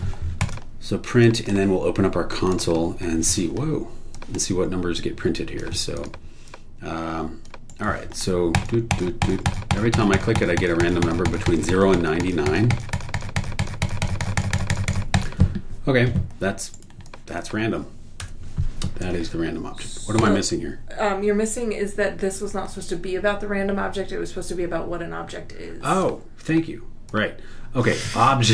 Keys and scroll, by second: 0.0-0.1 typing, 7.7 super+e, 16.7 super+e, 18.2 BackSpace.